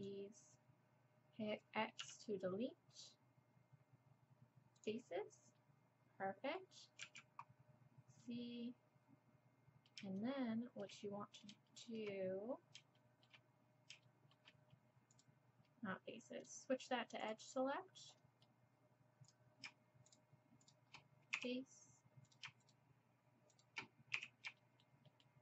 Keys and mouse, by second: 2.0 x, 5.6-7.0 middle drag, 7.0 z, 7.5 middle click, 11.0-15.1 drag, 15.1-16.4 middle drag, 16.4-18.4 drag, 16.4-18.4 right drag, 18.4-21.4 middle drag, 21.4-25.4 drag, 21.4 f, 24.2 f.